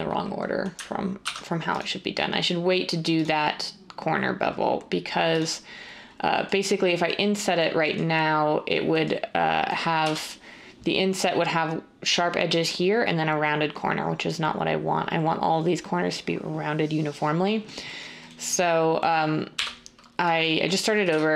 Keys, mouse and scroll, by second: 1.2 ctrl+r, 10.0 1, 19.5 7, 21.0-21.3 typing.